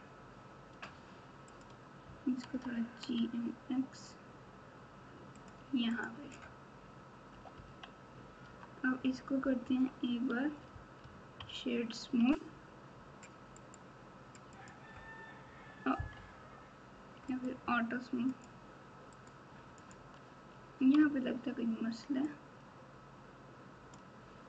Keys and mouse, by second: 1.4 click, 2.5 g, 5.9 click, 7.3 KP_8, 7.5 KP_8, 8.4 Tab, 9.6 KP_1, 11.3 ctrl+KP_6, 11.8 ctrl+KP_6, 13.6-14.7 right drag, 16.1 KP_8, 17.3-18.4 right drag, 19.1 right click, 21.0 Tab, 22.2-23.9 drag.